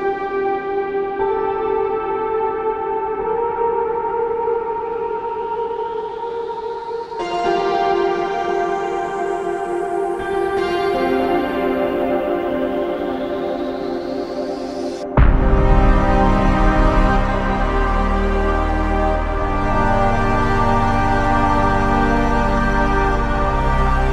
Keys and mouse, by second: 3.7 ctrl+click, 6.2 ctrl+click, 7.4 ctrl+click, 9.5 ctrl+click, 11.8 w, 13.4 alt+click, 23.6 ctrl+click.